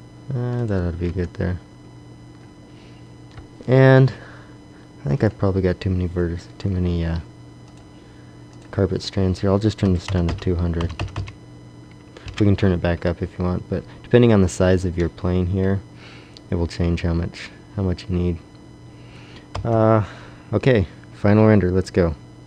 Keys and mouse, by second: 1.4 Tab, 5.0-7.5 middle drag, 7.6-10.2 drag, 10.2 KP_0, 10.9 KP_0, 17.6-19.1 middle drag, 19.4 KP_0.